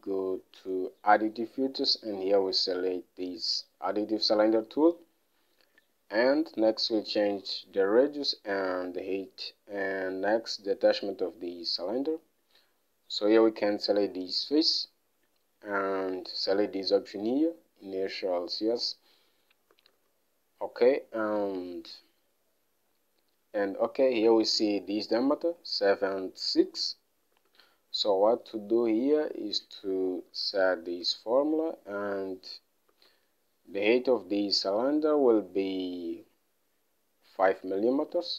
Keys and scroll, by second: 0.3 alt+Tab, 20.3 alt+Tab, 28.0 alt+Tab, 30.4-31.6 typing, 33.5 alt+Tab.